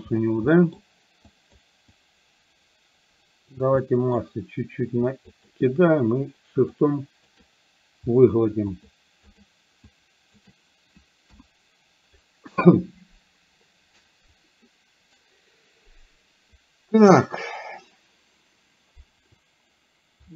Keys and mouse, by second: 0.5 middle click, 1.3 click, 2.0-3.5 drag, 3.9 middle click, 5.4 shift+click, 6.8 shift+click, 8.8 shift+click, 9.3 shift+click, 9.9 shift+click, 11.3 KP_1.